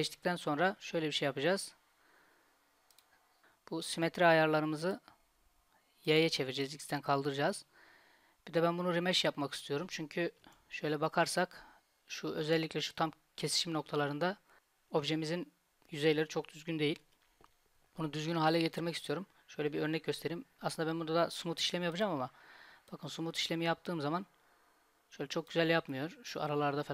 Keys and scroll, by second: 10.5 Tab, 17.1 Tab.